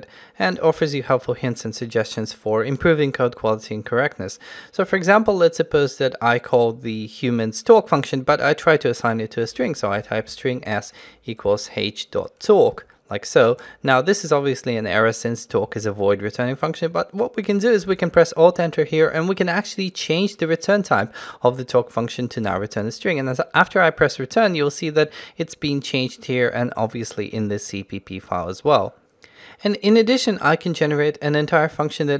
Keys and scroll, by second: 12.8 Tab, 17.9 alt+Return.